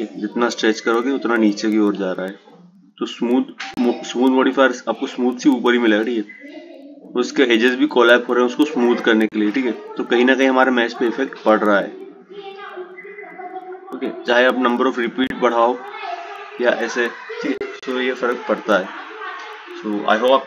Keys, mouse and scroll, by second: 11.1-14.2 drag, 17.8-20.4 drag.